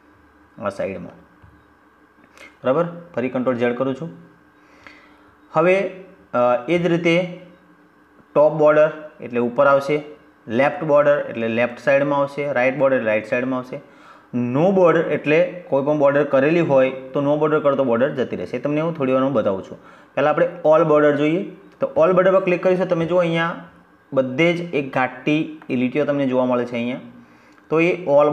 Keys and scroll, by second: 2.3 ctrl+z.